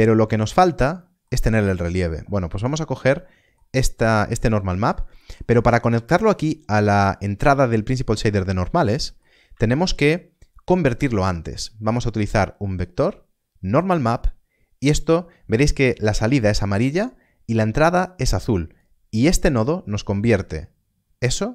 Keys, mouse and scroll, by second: 2.4 scroll up 1, 3.1 middle click, 4.4 scroll down 1, 5.1 middle click, 6.2 click, 8.1 scroll up 1, 8.7 middle click, 9.8 shift+a, 13.7 shift+a, 18.0 click.